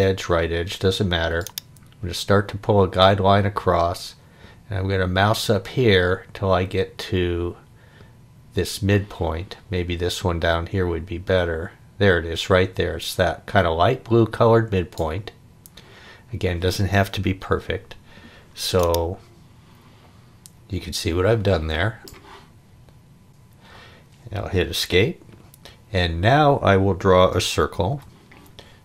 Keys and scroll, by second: 24.8 Escape, 27.9 c.